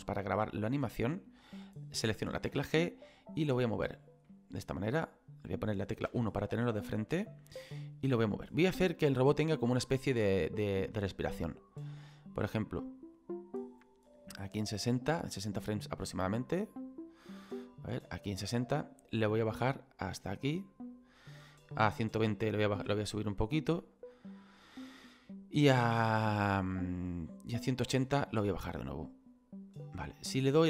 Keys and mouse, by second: 3.9 click, 4.2 middle click, 6.1 KP_1, 8.5 click, 10.1 click, 16.3 click, 18.0 Left, 20.8 click, 22.0 click, 22.8 g, 23.9 click, 25.3 click, 26.6 click, 29.7 click.